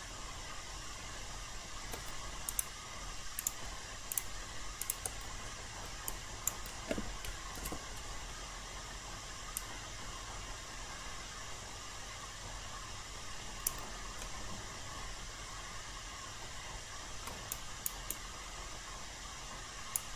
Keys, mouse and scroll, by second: 2.5 click, 4.1 shift+click, 4.8 shift+click, 5.5 alt+middle click, 6.0 alt+click, 7.5 ctrl+e, 9.5-13.8 drag, 14.2-17.2 alt+middle drag, 17.5 alt+right click, 18.1 alt+click.